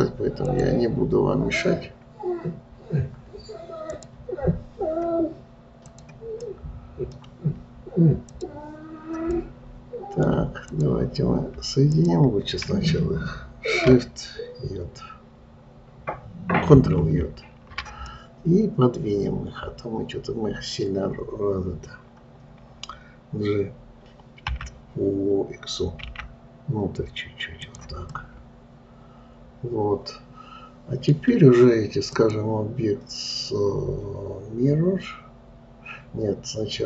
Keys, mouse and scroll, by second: 0.9 click, 4.3-6.4 drag, 6.9-8.7 middle drag, 8.7-9.7 drag, 9.7-11.1 middle drag, 11.1 click, 12.3 shift+click, 18.5-21.6 middle drag, 28.6-31.6 middle drag, 32.5-35.7 drag.